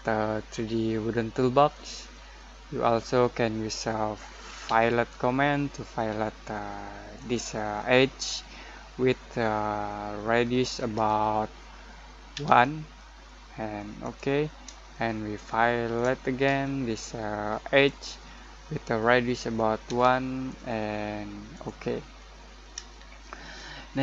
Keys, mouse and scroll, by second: 4.6 f, 7.1 click, 12.3 1, 14.0 click, 14.1 click, 14.9-16.4 shift+middle drag, 16.4 f, 17.8 click, 18.0 click, 19.8 1, 21.5 click, 22.1 middle click, 22.8-24.0 shift+middle drag.